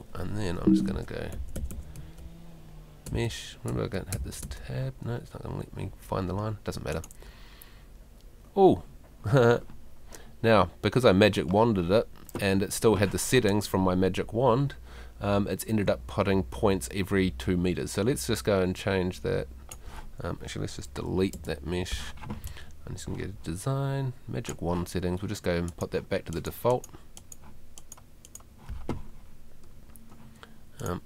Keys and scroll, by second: 0.5 `, 21.3 BackSpace.